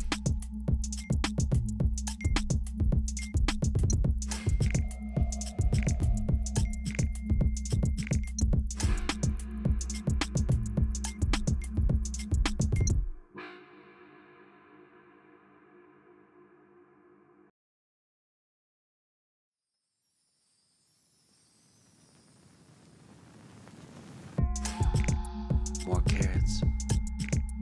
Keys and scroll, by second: 0.1 Up, 0.6 Up, 8.1-9.9 typing, 11.2 ctrl+t, 14.4 Return, 16.0 ctrl+h.